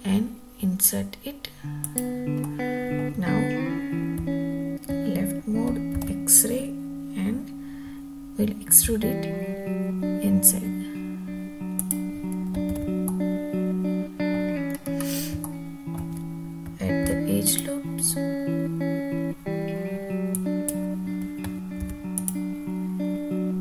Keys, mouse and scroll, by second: 2.0 click, 2.5 scroll down 1, 2.5 middle click, 4.3 `, 6.1 alt+z, 9.0 e, 11.9 click, 12.8 alt+z, 13.2-14.5 middle drag, 14.8-15.4 scroll up 3, 15.5-16.0 shift+middle drag, 17.1 ctrl+r, 20.5 click, 21.9 ctrl+r.